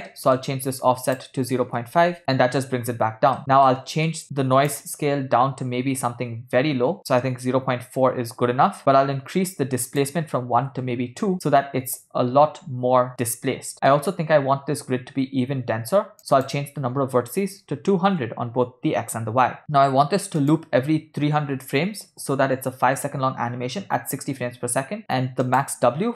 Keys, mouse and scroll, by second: 0.3 ctrl+middle click, 1.1-2.2 drag, 3.7 middle click, 4.7-7.0 drag, 7.2-8.4 middle drag, 9.8-10.8 drag, 13.7 middle click, 16.2-18.4 shift+drag, 17.8 0, 19.6 middle click, 20.4-22.4 drag, 21.6 0, 25.5-26.1 drag.